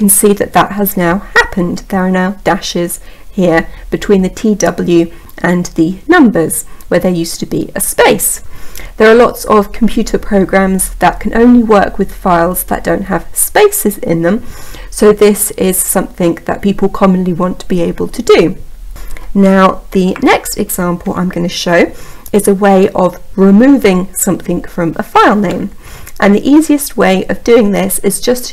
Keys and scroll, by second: 19.9 Up.